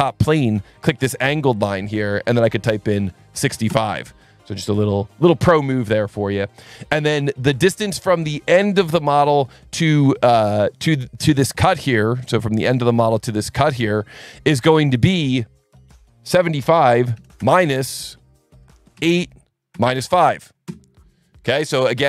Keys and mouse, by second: 0.8 click, 1.6 click, 3.1 KP_6, 3.5 KP_5, 3.7 KP_Enter, 12.6 click, 13.8 click, 14.8 click, 16.9 KP_7, 17.2 KP_5, 17.4 KP_Subtract, 18.6 BackSpace, 19.7 KP_Subtract, 19.9 KP_5, 20.6 KP_Enter.